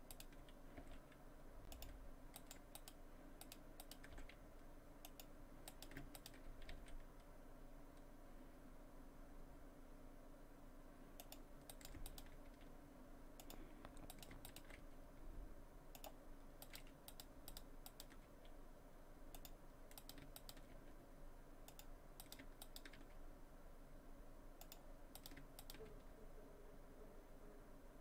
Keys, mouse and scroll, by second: 0.1 shift+right click, 0.8 g, 2.4 right click, 2.8 shift+right click, 3.8 right click, 4.1 g, 5.7 right click, 6.2 shift+right click, 6.7 g, 11.7 right click, 12.1 shift+right click, 12.5 g, 14.1 right click, 14.5 shift+right click, 14.8 g, 16.6 right click, 17.1 shift+right click, 17.5 shift+right click, 17.9 shift+right click, 18.3 g, 20.0 right click, 20.4 shift+right click, 20.7 g, 22.2 right click, 22.6 shift+right click, 23.0 g, 25.2 right click, 25.6 shift+right click, 25.9 g.